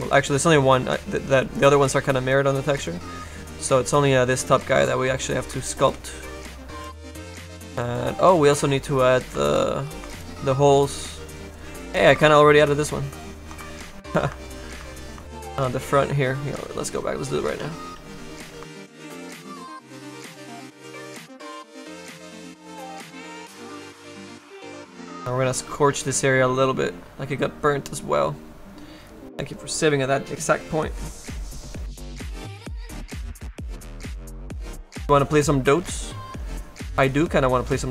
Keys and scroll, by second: 17.6 s, 17.9 s.